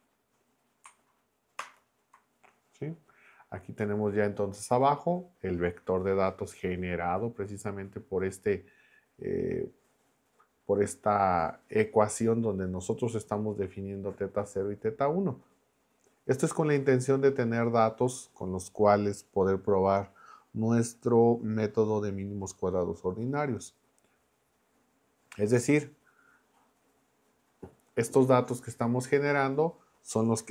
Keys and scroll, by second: 1.6 ctrl+Return.